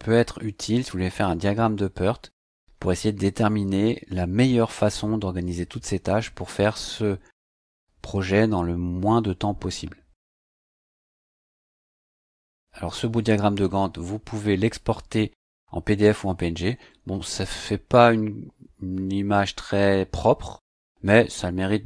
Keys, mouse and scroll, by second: 14.6 click.